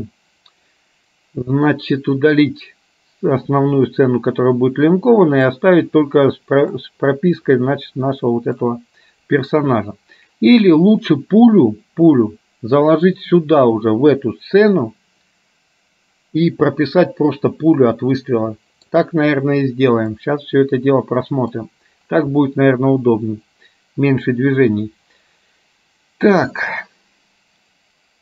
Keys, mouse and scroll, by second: 5.6-7.0 middle drag, 8.7 middle click, 18.5-19.6 middle drag, 20.2-21.6 middle drag, 22.6-24.5 middle drag.